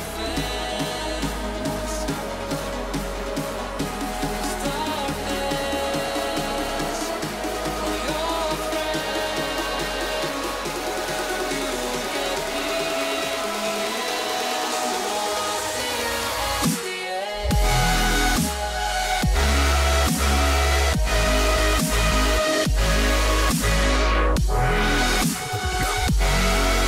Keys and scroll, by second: 10.3 ctrl+shift+a, 13.5 h.